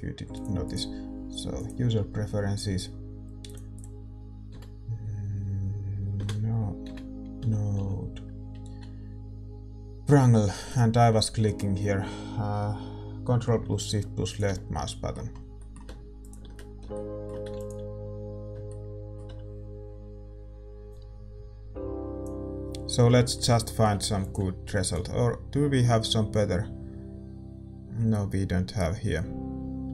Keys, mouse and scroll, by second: 14.2-29.9 drag, 16.2-29.9 middle drag.